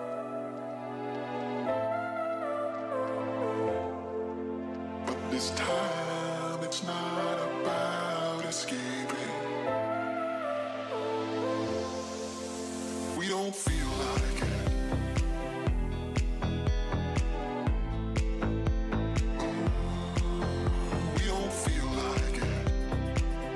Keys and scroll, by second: 7.2 ctrl+0, 11.3 ctrl+z, 19.3 ctrl+=, 22.6 ctrl+z.